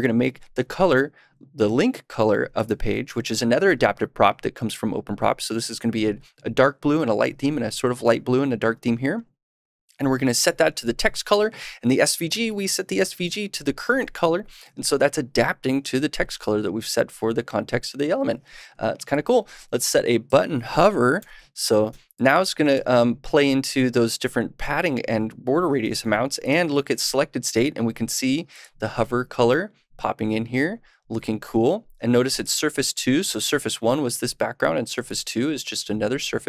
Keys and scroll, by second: 21.1 super+/, 21.6 super+s.